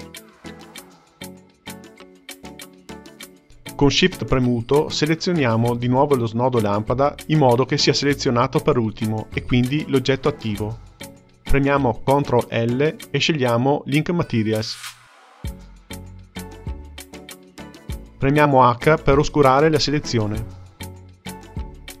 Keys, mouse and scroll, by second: 4.5 shift+click, 5.1 shift+click, 5.6 shift+click, 12.6 ctrl+l, 18.6 h, 19.6-22.0 middle drag.